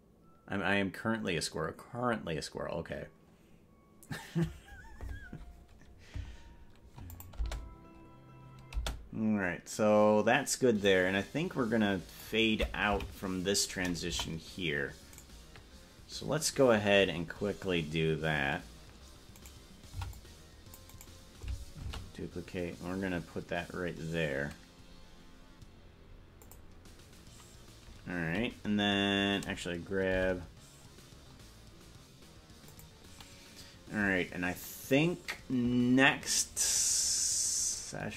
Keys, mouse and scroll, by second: 7.3 click, 7.6 space, 9.0 space, 11.0-12.4 drag, 13.2 Left, 14.2 KP_0, 15.4 right click, 17.4-18.4 scroll down 10, 18.2 scroll up 1, 19.6 right click, 20.0 c, 22.0 shift+d, 26.6 shift+d, 30.2 g, 37.2 scroll down 3, 37.4-38.0 scroll down 7.